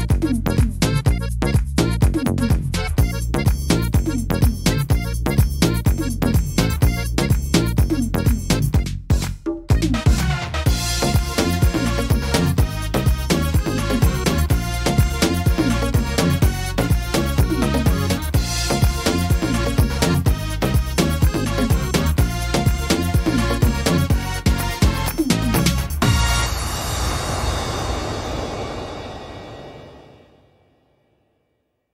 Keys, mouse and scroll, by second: 0.4 right click, 0.9 shift+right click, 2.2 click, 3.1 middle click, 3.7 shift+middle click, 4.2-5.2 scroll up 2, 4.5 middle click, 5.2-5.7 scroll down 2, 5.6 middle click, 6.2-6.9 scroll up 3, 6.9 middle click, 7.7 shift+middle click, 10.4 right click, 10.9 shift+right click, 11.2 right click, 11.7 shift+right click, 12.2 shift+right click, 12.6 shift+right click, 12.9 middle click, 13.9 shift+d, 14.5 middle click, 15.9 e, 19.4 middle click, 20.3 right click, 20.7 shift+right click, 21.2 shift+right click, 21.6 shift+right click, 22.3 click, 25.1 right click, 25.5 shift+right click, 26.1 click, 28.4 right click, 28.8 shift+right click, 29.5 right click, 29.8 shift+right click, 30.3 middle click, 30.6 scroll down 2, 31.6 e.